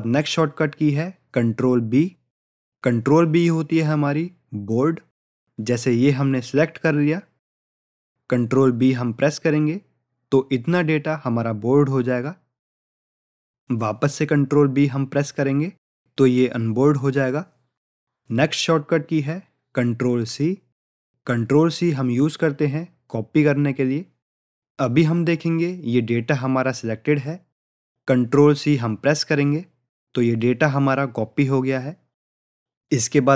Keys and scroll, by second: 9.5 ctrl+b, 14.7 ctrl+b, 29.7 ctrl+c.